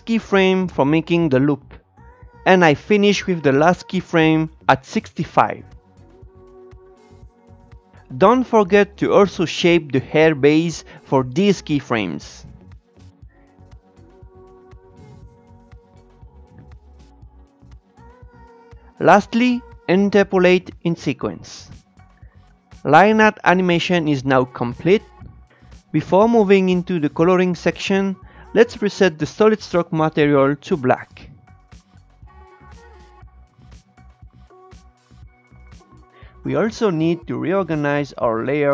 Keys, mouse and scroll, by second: 1.8 click, 2.4 shift+middle click, 2.4 scroll up 3, 2.6-3.8 drag, 3.8 shift+middle click, 3.9 click, 4.0 shift+middle click, 4.1-6.8 drag, 6.8 shift+middle click, 6.8 click, 6.9 shift+middle click, 7.0-7.4 scroll down 3, 8.1 Tab, 8.4-12.0 drag, 12.5-15.4 drag, 15.8-18.2 drag, 18.2 Tab, 18.9 ctrl+shift+e, 19.6 click, 20.2 ctrl+shift+e, 20.7 click, 20.9 ctrl+shift+e, 21.3 click, 21.5 ctrl+shift+e, 21.6-23.5 shift+middle drag, 28.3-30.9 drag, 32.4-35.4 drag.